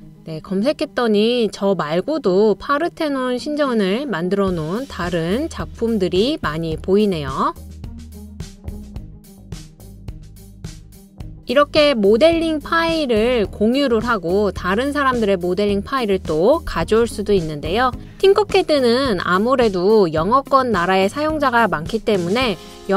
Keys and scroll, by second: 6.4-7.1 typing, 11.7 typing, 17.9-18.7 typing.